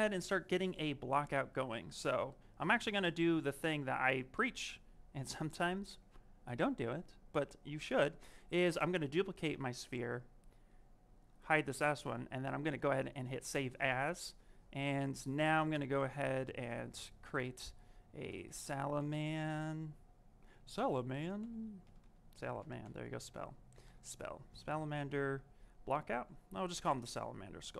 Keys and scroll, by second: 17.1 ctrl+shift+n, 18.0-19.0 typing, 21.3 n.